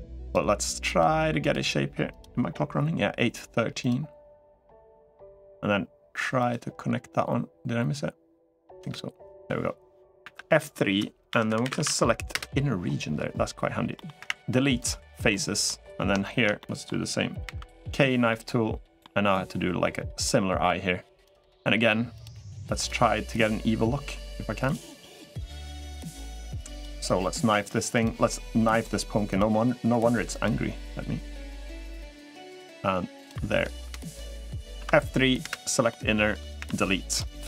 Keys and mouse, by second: 11.6 F3, 11.6 n, 13.7 middle click, 15.0 Delete, 15.0 middle click, 16.0 shift+middle click, 16.3 middle click, 17.3 k, 18.0-33.7 middle drag, 34.8 F3, 35.6 middle click, 36.8 Delete, 37.3 middle click.